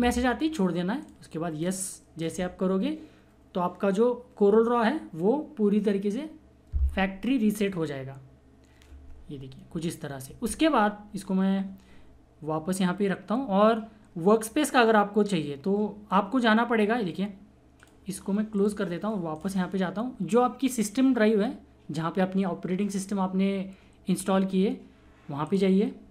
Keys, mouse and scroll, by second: 1.0 click, 17.7 click, 17.7 typing, 25.4 click, 25.4 typing.